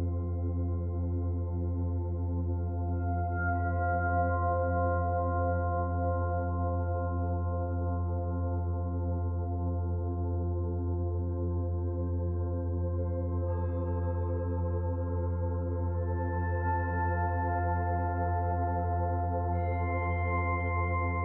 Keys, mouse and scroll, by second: 5.6 middle click, 11.3 middle click, 12.8 scroll down 1, 15.0 Tab, 16.7 alt+click, 17.9 alt+shift+click, 20.9 click.